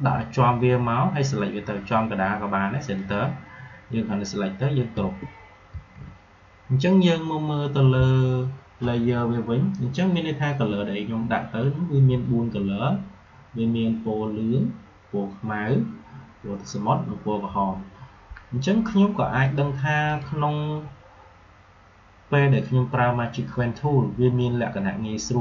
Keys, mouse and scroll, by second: 2.9 click, 5.6 ctrl+g, 19.3 click, 22.4 click.